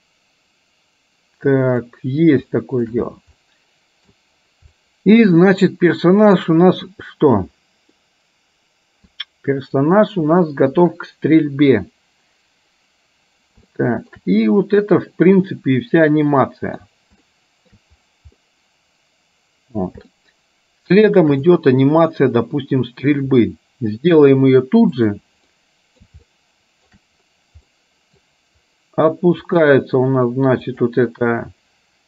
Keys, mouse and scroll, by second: 2.6 shift+middle click, 3.5 middle click, 4.8-6.5 middle drag, 8.1-9.1 middle drag, 13.8 shift+middle click, 15.6-16.9 middle drag, 17.3 shift+middle click, 18.5-19.8 middle drag, 20.3-21.4 shift+middle drag, 21.6 middle click, 25.1 click, 25.5 middle click, 26.4 shift+middle click, 27.8 middle click, 30.9 click.